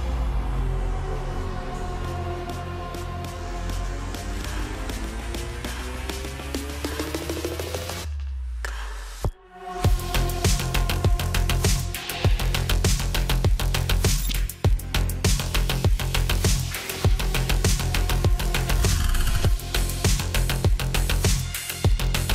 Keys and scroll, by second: 8.1-9.3 typing, 9.4 Return.